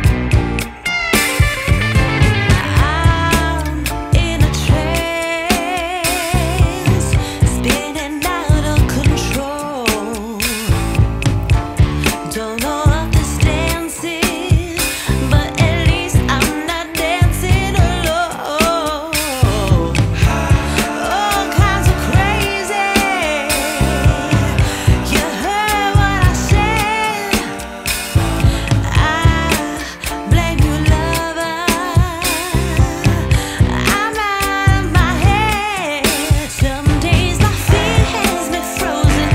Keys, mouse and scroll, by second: 1.9 double click, 2.1 0, 2.4 5, 2.5 Return, 15.1 double click, 27.6-29.6 scroll up 1, 29.7 middle click, 35.0 middle click, 35.2-37.0 scroll down 1.